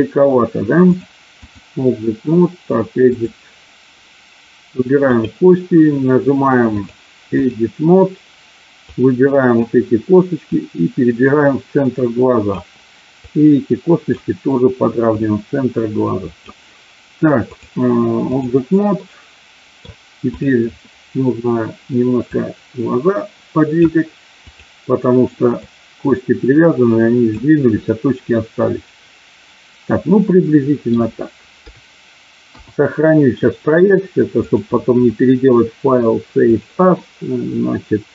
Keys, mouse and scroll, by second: 1.0 click, 3.0-4.0 drag, 7.0 click, 9.0 click, 10.5-12.5 drag, 13.2-14.2 drag, 15.2-16.6 drag, 17.6 click, 18.9-19.9 middle drag, 22.3-23.8 drag, 24.5 click, 25.4-27.2 drag, 27.8-30.9 middle drag, 31.6 KP_4, 32.4 KP_1, 34.4-36.8 drag.